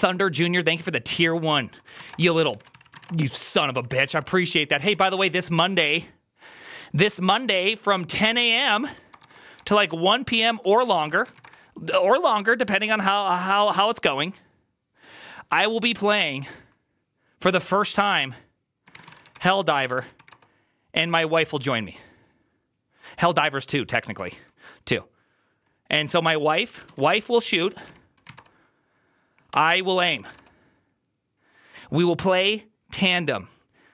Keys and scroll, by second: 1.6-5.3 typing, 3.4 ctrl+u, 8.4-11.7 typing, 19.1-20.5 typing, 26.5-30.7 typing.